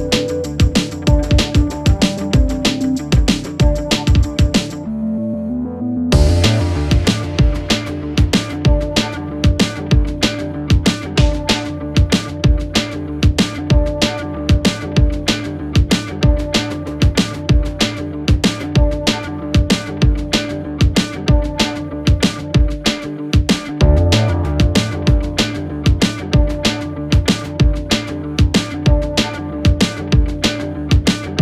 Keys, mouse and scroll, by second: 0.5-1.5 typing, 2.0-3.3 click, 11.1-12.4 typing, 13.1-15.1 click, 17.3 click, 22.5-26.3 click, 28.2-31.2 click.